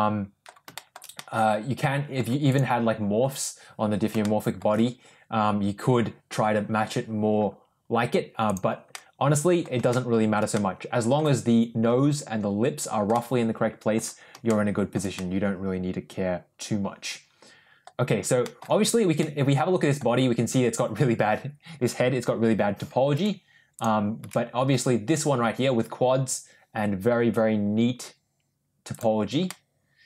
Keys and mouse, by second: 0.6 shift+middle drag, 1.0-2.1 middle drag, 4.1-4.5 shift+middle drag, 8.8 middle click, 9.8 shift+middle click, 10.4 middle click, 13.0 middle click, 14.4 shift+middle click, 15.0-17.7 middle drag, 18.3 middle click, 18.7 Tab, 19.1 middle click, 23.0 Tab, 24.2 Tab, 28.8 click, 29.4 middle click.